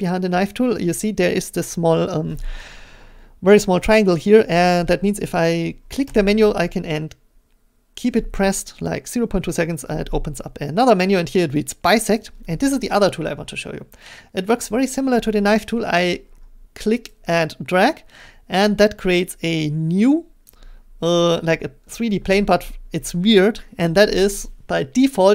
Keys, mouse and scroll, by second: 12.1 click, 15.5 middle click, 20.5 click, 21.8 middle click.